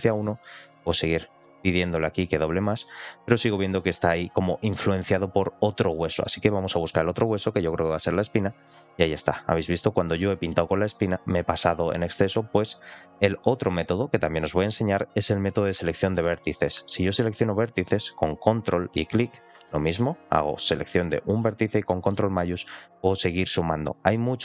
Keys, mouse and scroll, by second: 0.2 middle click, 0.6-2.3 drag, 2.5 middle click, 4.6 middle click, 6.0 shift+middle click, 7.1 shift+middle click, 8.1 ctrl+click, 9.2 shift+middle click, 9.8 shift+middle click, 11.8 middle click, 16.2 click, 17.4 shift+middle click, 19.1 ctrl+click, 22.9 ctrl+shift+click, 23.4 ctrl+shift+click.